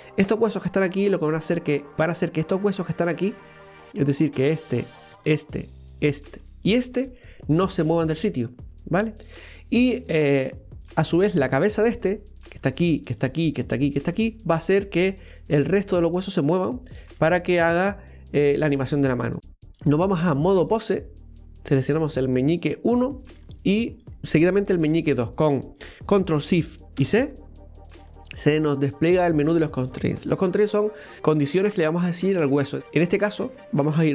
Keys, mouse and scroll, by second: 4.4 right click, 5.2 shift+right click, 6.0 right click, 6.7 right click, 7.6-10.7 middle drag, 12.4 right click, 13.2 shift+right click, 13.7 shift+right click, 14.5 shift+right click, 19.7-21.3 drag, 21.3 right click, 23.9 shift+right click, 27.0 ctrl+shift+c.